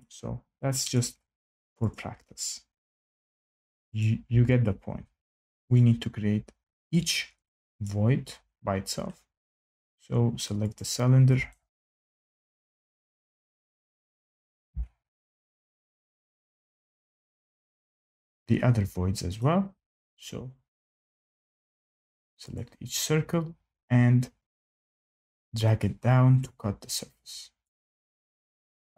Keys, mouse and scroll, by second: 0.9 click, 1.9 click, 3.1 click, 3.9 click, 4.2 Escape, 4.8 Escape, 5.2 click, 5.7 click, 7.0 click, 7.8 click, 10.7 click, 12.2 shift+middle click, 13.7 click, 15.1 F8, 15.1 click, 15.6-17.0 scroll down 6, 17.0 scroll up 2, 17.6 scroll, 19.3 click, 20.1 Escape, 20.9 click, 21.9 click, 22.5 click, 25.0 click, 26.3 click, 27.6 click, 28.6 click.